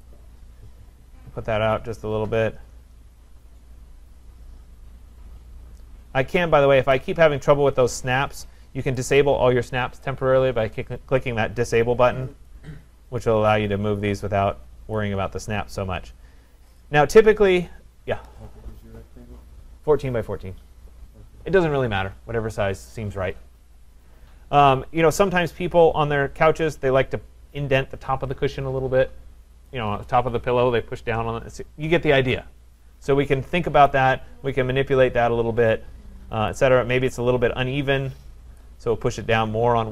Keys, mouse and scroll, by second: 3.1 scroll, 6.9 click, 9.0 click, 15.0 click, 15.4-16.6 scroll, 16.6 scroll, 16.8 click, 25.7 click, 29.7 click, 33.9 click, 38.6 click.